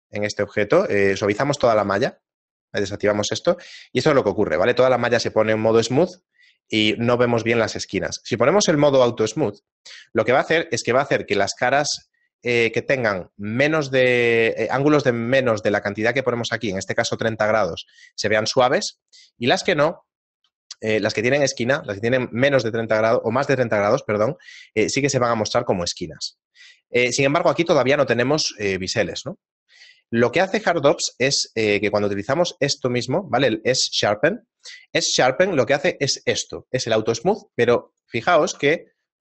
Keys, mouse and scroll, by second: 0.5 right click, 1.3 click, 1.8 click, 3.7 shift+middle click, 5.7 shift+middle click, 9.1 click, 10.3 shift+middle click, 24.1 shift+middle click, 28.8 shift+middle click, 30.9 q, 38.6 Tab.